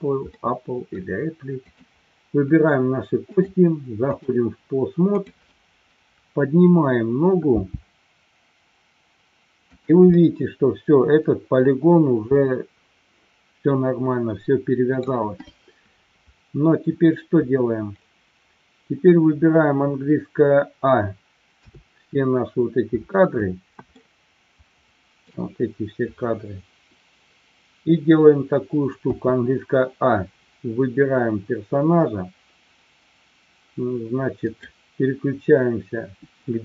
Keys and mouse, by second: 0.3-1.0 middle drag, 1.6 click, 3.3-4.4 drag, 7.6 g, 9.9 drag, 10.2-11.6 middle drag, 12.3-15.2 middle drag, 21.6 a, 24.1-25.4 shift+middle drag, 29.1 a, 35.3 click.